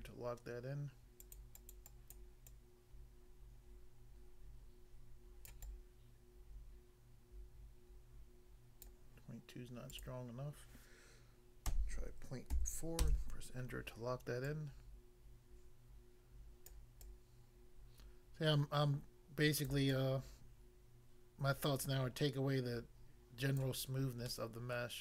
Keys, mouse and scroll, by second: 1.2 click, 1.4 click, 1.5 click, 1.7 click, 1.9 click, 2.2 click, 2.5 click, 5.5 click, 5.6 click, 8.9 click, 9.9 click, 10.0 click, 11.7 ., 12.5 4, 13.0 Return, 14.4 click, 16.7 click, 17.0 click, 19.7 click, 19.9 click, 23.6 click, 23.8 scroll down 1, 24.3 middle click, 24.8 middle click.